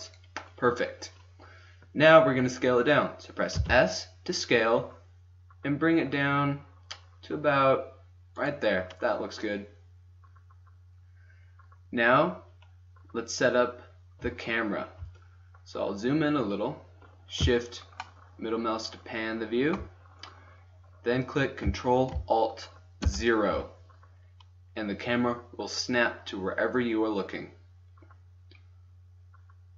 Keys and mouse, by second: 3.5 s, 16.1 middle click, 17.7 middle click, 18.9-19.9 middle drag, 21.5-23.0 middle drag, 23.0 ctrl+alt+KP_0, 28.3 middle click.